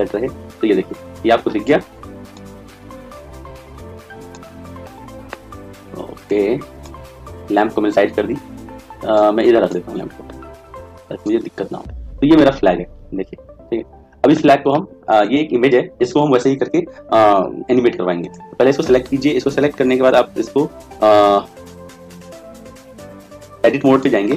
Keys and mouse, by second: 6.2 click, 10.3 right click, 10.9 click, 12.3-16.8 middle drag, 18.1-21.9 right drag.